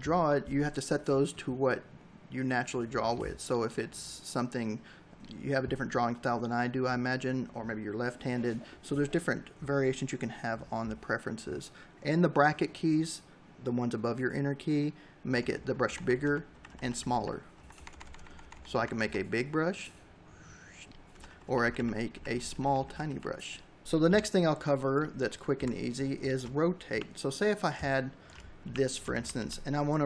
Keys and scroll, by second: 14.1 ], 15.4 [, 16.6 ], 20.0 [, 23.8 v, 24.4 Delete, 25.0 space, 25.7 l, 27.4 v, 27.9 ctrl+-, 28.2 v.